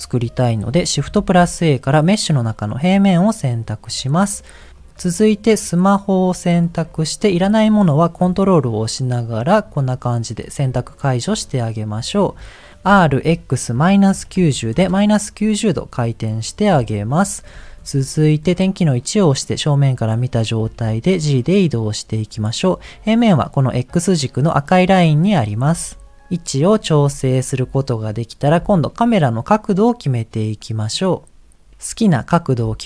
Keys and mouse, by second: 1.3 shift+a, 5.5 click, 8.8 ctrl+click, 10.4 middle click, 10.9 ctrl+click, 12.8 r, 16.8 KP_1, 20.8 g, 25.6 g, 26.4 middle click, 29.5-31.0 middle drag, 32.6 middle click.